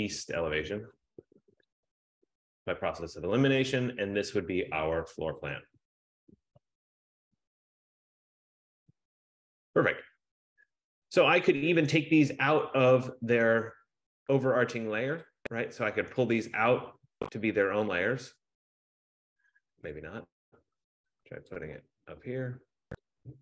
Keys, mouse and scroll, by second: 0.2-3.2 typing, 4.3 click, 4.8 click, 5.4 click, 5.4-8.5 typing, 5.7 click, 17.2 click, 20.0 click.